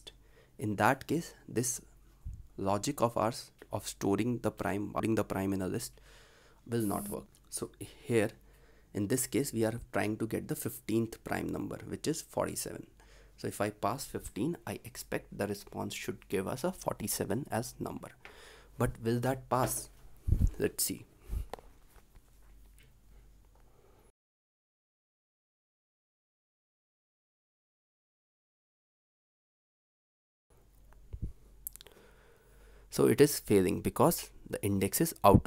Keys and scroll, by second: 24.6 ctrl+s.